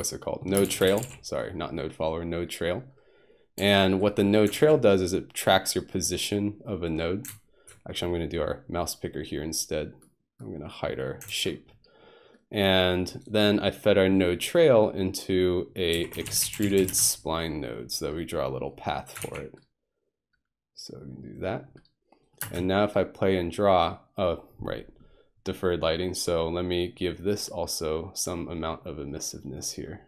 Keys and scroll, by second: 0.6 typing, 2.4 typing, 4.6 ctrl+alt+r, 7.3 ctrl+s, 11.3 ctrl+1, 15.9-16.9 typing, 19.2 ctrl+r, 22.4 space.